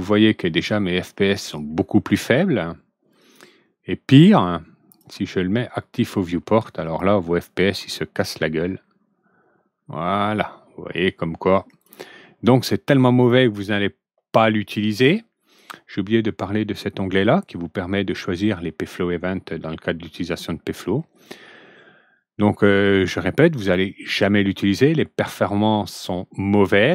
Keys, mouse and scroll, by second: 3.1 click, 4.8 click, 6.8 click, 7.5 click, 11.6 click.